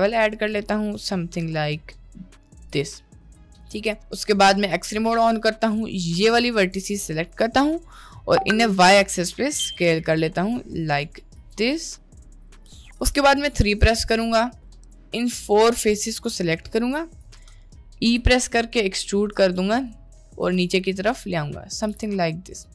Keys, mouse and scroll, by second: 3.5 click, 4.6 click, 5.4-6.7 drag, 8.6 s, 12.4 click, 12.6 middle click, 13.6 3, 14.1 click, 14.9 shift+click, 15.8 click, 16.8 shift+click, 17.4 middle click, 18.2 e, 21.0 middle click, 22.0 g.